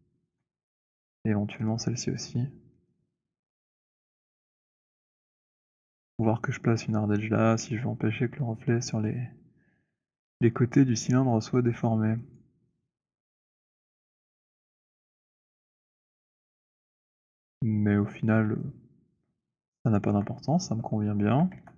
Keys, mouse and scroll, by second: 0.2 shift+click, 1.5 click, 1.7 click, 5.8 shift+right click, 10.0 scroll, 10.8-11.6 scroll, 11.6 alt+click, 12.4 alt+click, 13.3 alt+click, 15.0 alt+click, 15.5 alt+click, 15.9 w, 17.0 click, 17.6-18.2 scroll, 20.0 alt+click, 20.5 scroll, 21.1 scroll, 21.4 alt+d.